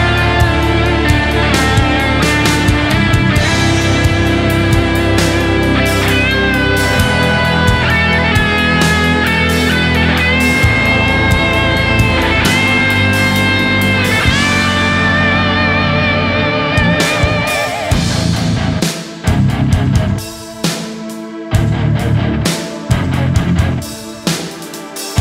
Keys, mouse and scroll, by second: 1.3-1.8 typing, 3.5 typing, 3.7 double click, 4.9 typing, 6.0 shift+click, 6.5 right click, 7.4 typing, 8.7 double click, 9.1 shift+right click, 9.3 typing, 10.9 typing, 11.1 double click, 11.4 shift+click, 11.6 shift+double click, 11.7 shift+click, 13.6 shift+click, 13.7 shift+double click, 13.9 shift+click, 14.5 shift+click, 14.6 shift+double click, 17.4 ctrl+click, 17.7 right click, 18.1 shift+click, 18.2 shift+double click, 18.4 shift+click, 19.2 right click, 20.3 typing, 24.4 typing.